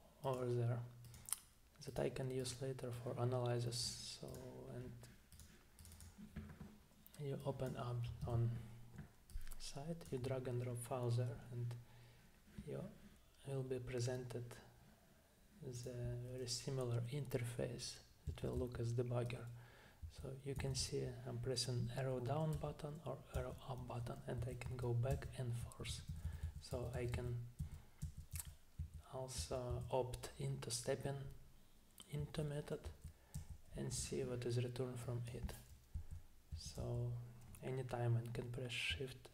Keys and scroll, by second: 8.2 super+Tab, 18.3 Down, 18.6 Down, 20.0 Down, 20.6 Down, 22.5 Up, 23.4 Up, 23.8 Up, 24.4 Down, 25.1 Down, 25.6 Up, 26.1 Down, 26.7 Down, 27.1 Down, 32.2 Right, 32.9 Down, 33.4 Down, 36.0 Down, 36.5 Down.